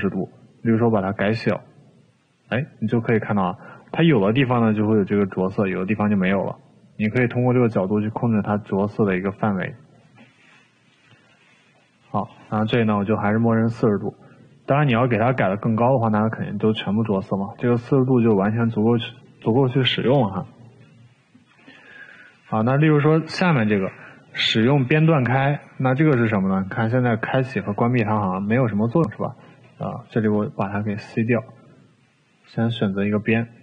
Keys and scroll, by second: 16.5 ctrl+z, 30.4 c.